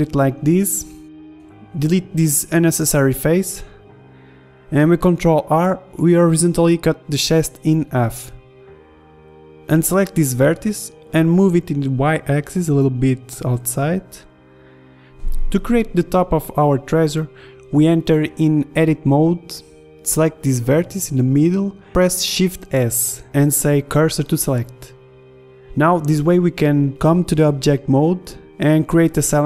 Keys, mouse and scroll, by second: 1.9 ctrl+z, 3.0 Delete, 4.1 Delete, 7.2 Tab, 7.4 ctrl+r, 11.2 ctrl+Tab, 11.8 b, 14.8 middle click, 16.5 click, 17.3 Tab, 17.6 Tab, 19.0 ctrl+Tab, 22.3 shift+s, 23.2 Tab, 24.2 KP_1, 25.4 KP_5, 26.0 shift+a.